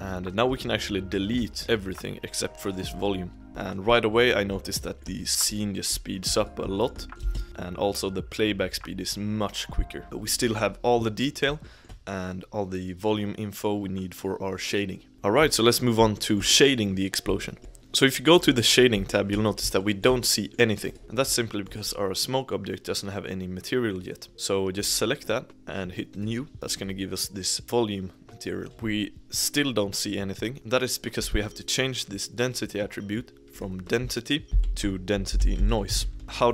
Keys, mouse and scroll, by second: 0.8-2.7 shift+middle drag, 2.7 click, 3.4 g, 3.8 drag, 4.1-5.4 middle drag, 5.4 click, 5.7-6.3 middle drag, 6.3 click, 6.7-7.1 shift+middle drag, 7.1 space, 10.0-14.1 shift+middle drag, 15.1-16.4 shift+middle drag, 20.3 middle click, 20.9 click, 21.0-24.8 shift+middle drag, 24.8 click, 26.5 shift+middle click, 30.5 click, 36.2 shift+middle click.